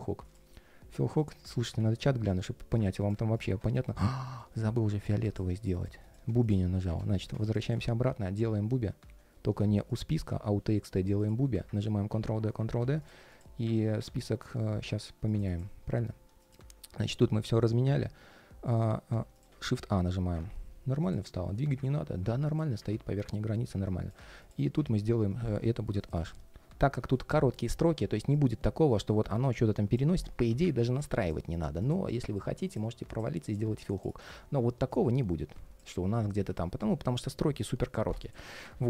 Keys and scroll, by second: 1.5 super+d, 3.6 ctrl+shift+3, 4.0 ctrl+shift+3, 11.5 super+d, 30.6 super+z, 36.1 super+z.